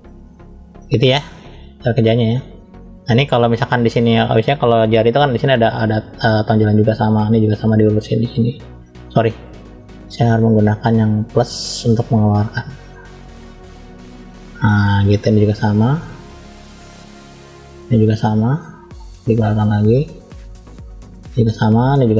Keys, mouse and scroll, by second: 0.9 scroll down 1, 1.4 middle click, 1.4-1.8 scroll down 1, 2.9 scroll up 1, 3.9 scroll down 1, 4.4-5.4 scroll down 1, 6.4 click, 9.2-9.8 drag, 11.3 click, 12.3 click, 14.1 middle click, 15.4 click, 17.6 click, 18.8 click, 19.8-21.4 drag, 21.7 click.